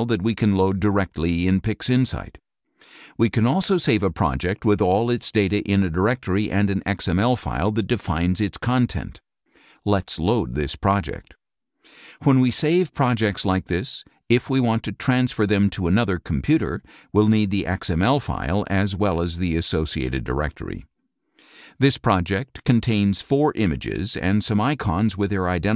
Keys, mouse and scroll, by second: 0.4-3.1 drag, 2.8 Escape, 3.4 click, 4.5 click, 7.3 click, 10.3-13.1 drag, 14.7 click, 15.6 click, 25.1-25.7 drag.